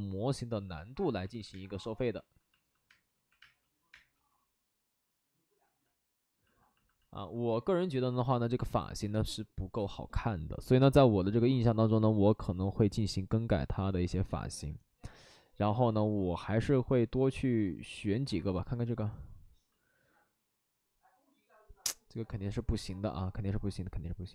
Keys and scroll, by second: 0.4 alt+s, 1.2 alt+s, 2.9-3.8 typing, 5.5 ctrl+z.